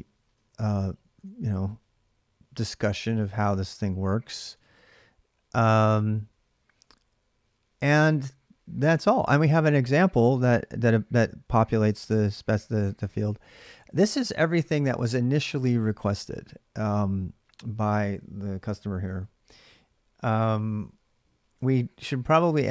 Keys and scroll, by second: 0.2 ctrl+[, 0.3 j, 0.5 j, 0.9 alt+Tab, 0.9 j, 4.3 alt+Tab, 5.6 ctrl+[, 5.7 j, 5.9 j, 6.2 j.